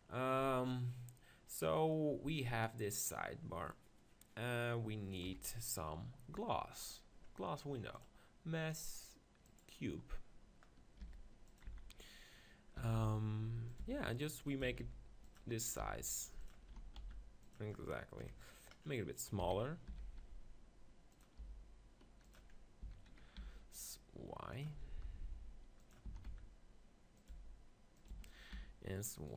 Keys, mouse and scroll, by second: 5.3 KP_1, 8.3-9.7 drag, 11.0 g, 11.6-13.4 drag, 11.7 z, 12.8 s, 13.8 click, 13.9 g, 14.6 s, 15.8 g, 16.7 s, 18.4 KP_7, 19.2 click, 19.4-21.1 middle drag, 19.4 s, 21.2-22.5 drag, 21.4 g, 22.5 middle click, 22.7-24.2 drag, 24.2 middle click, 24.6-29.1 drag, 25.2 g, 26.2 s, 27.4 g, 28.1 s.